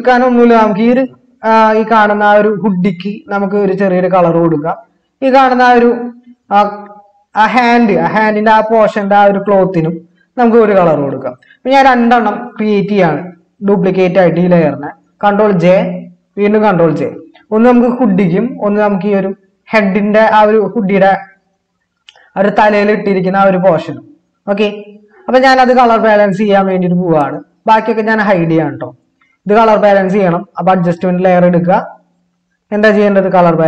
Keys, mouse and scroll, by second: 15.7 ctrl+j, 17.0 ctrl+j.